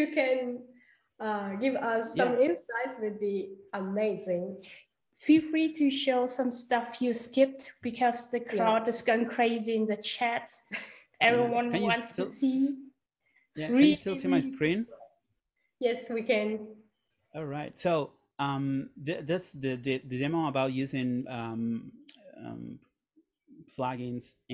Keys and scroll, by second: 14.8 super+..